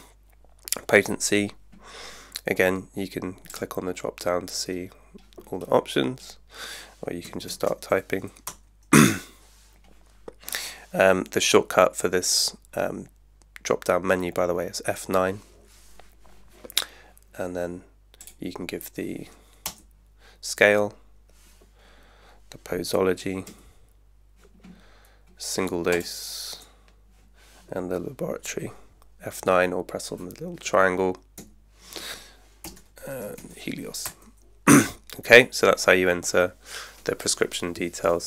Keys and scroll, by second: 7.3 KP_2, 7.5 KP_0, 8.4 Return, 14.9 F9, 19.7 Return, 23.5 F9, 26.6 Return, 31.4 F9, 32.4-33.9 typing, 34.0 Return.